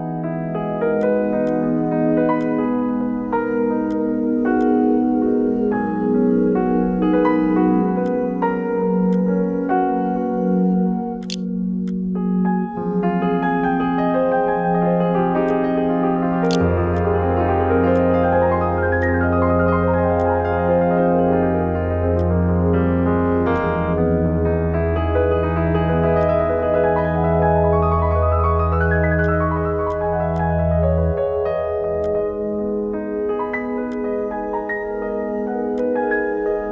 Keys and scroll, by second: 10.8 4, 11.2 3, 15.7-16.7 typing.